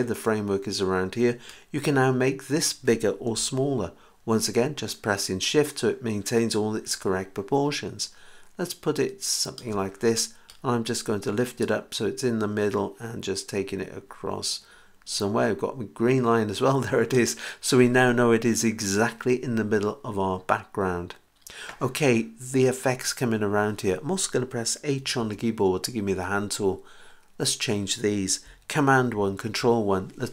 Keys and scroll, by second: 25.2 h, 29.1 super+i.